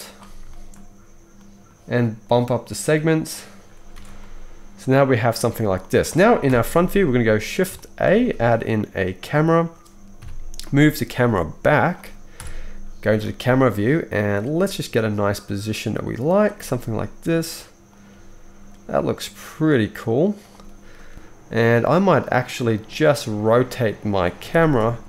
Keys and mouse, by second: 0.8-1.5 middle drag, 3.9 alt+a, 4.8-5.2 middle drag, 6.4 KP_1, 6.9-7.6 shift+middle drag, 8.0-9.2 shift+middle drag, 8.1 shift+a, 9.5-11.9 middle drag, 10.2 KP_3, 10.6-11.9 drag, 10.6-23.5 right drag, 11.0 g, 12.3 KP_0, 13.1 g, 14.5 g, 16.5 g, 18.1 g, 21.1 g, 23.5-25.0 middle drag, 24.4 r.